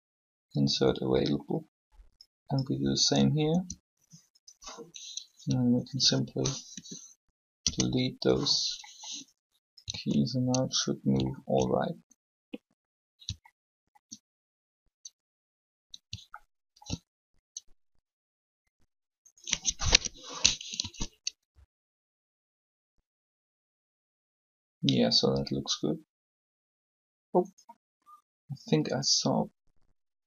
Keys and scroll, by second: 3.3 i, 6.6 shift+Delete, 7.6 Return, 9.9 alt+a, 19.6 0, 20.6 alt+a.